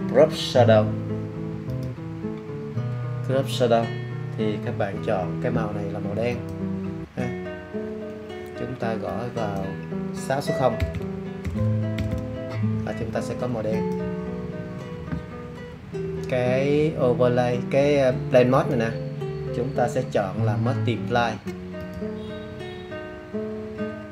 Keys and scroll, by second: 10.7-12.0 typing.